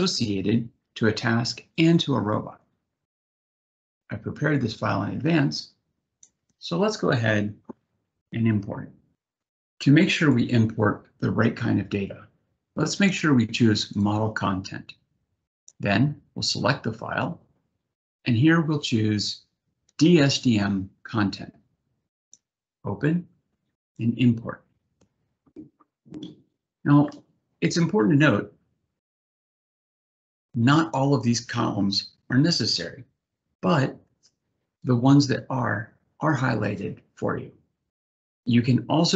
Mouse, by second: 0.6 click, 1.5 click, 4.2-5.8 drag, 10.0 click, 13.5 click, 19.8 click, 21.9 click, 23.6 click, 29.6-30.7 drag.